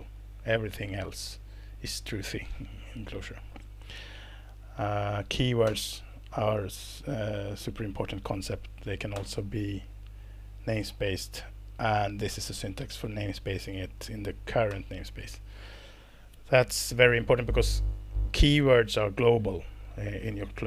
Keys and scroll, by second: 4.0 Down, 5.7 alt+Return, 9.1 alt+Return, 10.7 Down, 12.7 Left, 12.9 Left, 13.0 Left, 13.2 Left, 13.3 Left, 13.7 Right, 13.9 Right, 14.7 alt+Return.